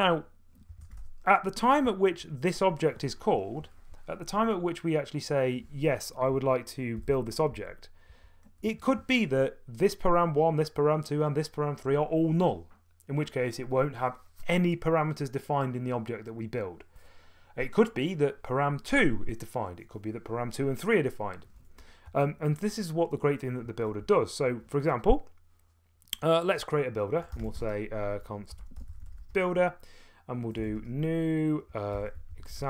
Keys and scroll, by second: 0.0-3.1 typing, 6.3-8.1 typing, 8.6 Return, 22.1 Return, 24.0 o, 27.1-32.6 typing.